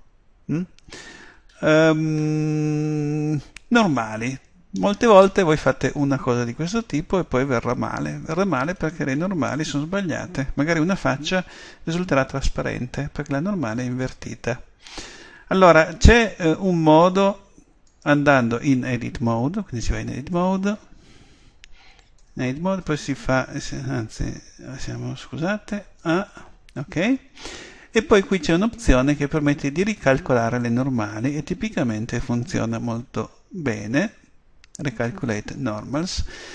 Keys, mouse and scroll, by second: 1.5-8.3 middle drag, 17.9-19.7 right drag, 20.4 Tab, 22.2 Tab, 22.8 a, 25.1 Tab, 26.0 a, 29.8-33.1 drag.